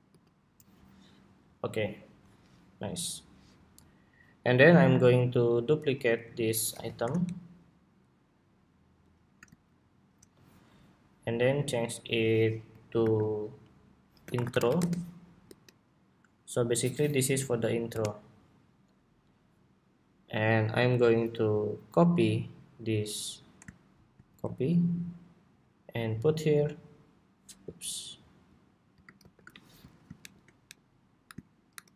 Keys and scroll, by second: 5.9 super+c, 6.4 super+v, 12.7 super+r, 24.1 super+c, 28.9 shift+super+v, 30.0 alt+shift+Down, 31.1 alt+Right.